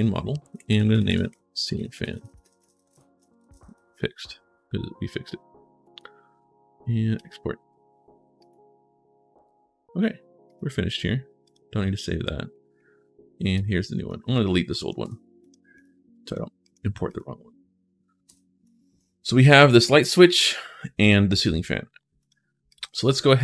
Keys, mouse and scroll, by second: 0.2-3.8 typing, 6.9 click, 8.2 click, 10.3 click, 11.2 click, 13.3 click, 14.1 click, 15.2 click, 15.6 click, 16.4 click, 16.9 click, 18.4 click, 19.4 click, 19.8 click, 20.8 click, 22.0 click, 22.5 click, 23.2 click.